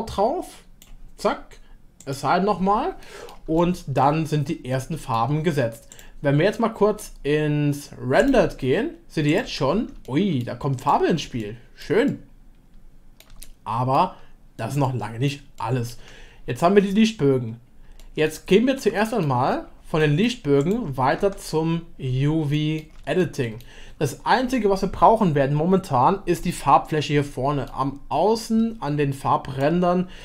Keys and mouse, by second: 2.0 click, 3.0 middle click, 3.6 shift+click, 4.8 click, 4.8 middle click, 5.9 click, 8.3 middle click, 9.7 Tab, 10.0-10.4 shift+middle drag, 11.4 middle click, 12.1-13.2 shift+middle drag, 13.4-13.9 middle drag, 14.8-15.4 middle drag, 15.6-15.9 shift+middle drag, 18.0 middle click, 18.5 shift+middle click, 18.9-19.2 middle drag, 20.0-20.4 middle drag, 21.2 Tab, 22.5 shift+middle click, 23.2-24.3 middle drag, 26.4-27.7 middle drag, 28.4-30.2 drag.